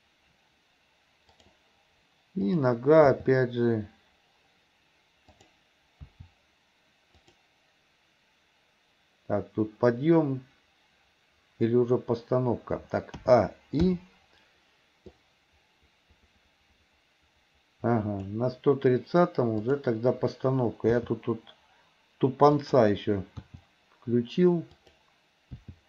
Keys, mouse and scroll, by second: 2.4 click, 3.1 g, 6.1 r, 13.2 a, 13.9 i, 15.2-18.4 drag, 19.6 click, 21.0 g, 23.5 r, 25.7 g.